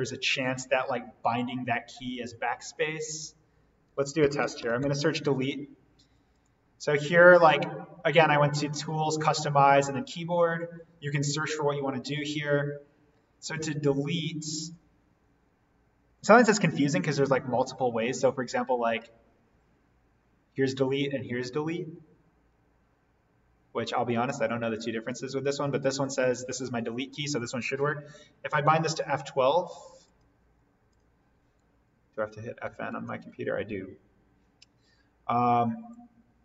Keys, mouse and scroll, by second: 3.0 click, 3.6-4.9 typing, 6.3 click, 30.0 click, 32.9 F12.